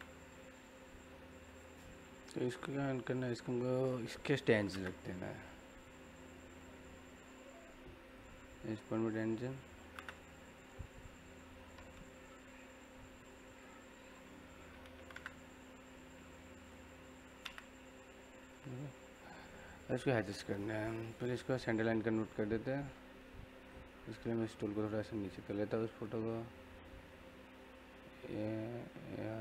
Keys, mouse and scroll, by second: 0.3 scroll down 1, 0.5 middle click, 1.0 scroll down 1, 1.1 middle click, 1.9-2.5 scroll up 1, 2.5 middle click, 3.1 click, 4.5 m, 4.7 space, 5.7 click, 8.0 click, 8.3-8.8 scroll up 1, 8.8 click, 9.8 m, 9.9 space, 10.8 click, 12.3 scroll down 1, 12.5 middle click, 13.1 click, 13.8 scroll down 1, 13.9 middle click, 14.7-15.1 typing, 16.5 click, 17.3 space, 18.5 middle click, 20.1 scroll down 1, 20.2 middle click, 20.9 scroll up 1, 21.2 middle click, 21.6-22.3 scroll down 1, 23.9-29.4 drag, 29.1-29.4 typing.